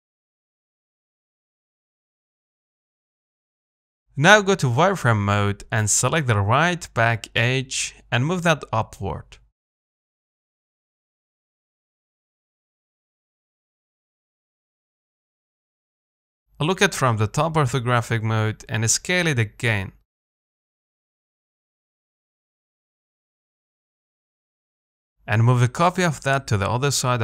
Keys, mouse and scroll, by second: 2.1 z, 2.3-4.3 middle drag, 4.3 scroll up 2, 4.5 shift+middle click, 4.8 z, 5.9 click, 6.8 g, 9.1 Tab, 9.5 z, 9.6 middle click, 10.2-10.7 scroll down 3, 10.7 middle click, 11.2-11.5 scroll up 1, 11.5-12.6 shift+middle drag, 12.6-12.9 scroll down 1, 12.9-15.3 middle drag, 15.3-15.7 scroll down 1, 15.7 middle click, 16.5 KP_7, 18.1 z, 18.3-18.7 scroll up 1, 18.7 Tab, 19.2 s, 20.1 a, 21.1 s, 24.9 Tab, 25.5 scroll down 1, 25.7 shift+middle click, 26.5 shift+d.